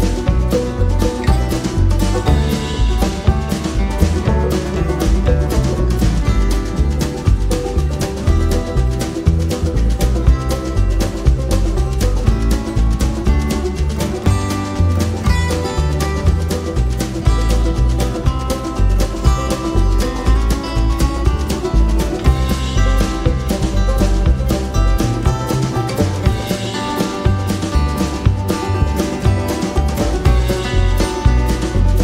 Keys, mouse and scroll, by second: 0.6 click, 2.3 click, 2.8 click, 3.7 click, 5.1-7.1 drag, 8.3 click, 12.0-13.4 drag, 14.0 click, 15.1 click, 15.8 click, 16.9 click, 17.9 click, 19.0 click, 20.0 click, 21.1 click, 23.1-24.6 drag, 25.5 click, 26.5 click, 27.5 click, 28.1 click, 28.8 click, 30.5 click.